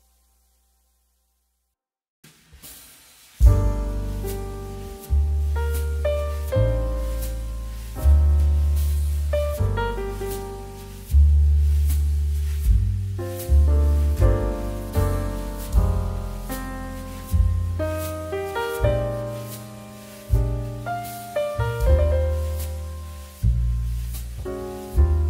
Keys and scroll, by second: 0.9 ctrl+space, 4.8 space, 6.2 space, 8.3 space, 9.3 z, 11.5 Escape, 12.1 space, 16.4 space.